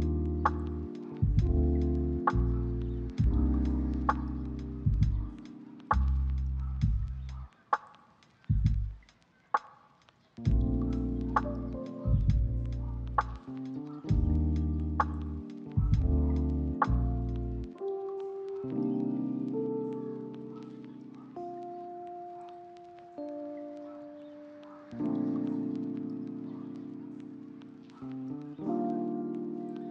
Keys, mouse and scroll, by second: 0.7 s, 0.9 double click, 3.7 double click, 7.1 middle click, 7.5 shift+middle click, 7.8 middle click, 8.3 double click, 12.7 shift+middle click, 13.5 shift+middle click, 15.6 1, 15.7 5, 15.9 Return, 16.1 double click, 18.4 shift+middle click, 18.8 ctrl+middle click, 18.9 middle click, 19.6 ctrl+middle click, 20.2 s, 20.4 s, 20.6 right click, 21.8 double click, 25.0 middle click, 25.4 double click, 26.2 middle click, 26.5 double click, 27.0 middle click, 27.4 double click, 28.3 middle click, 29.5 double click, 29.7 middle click.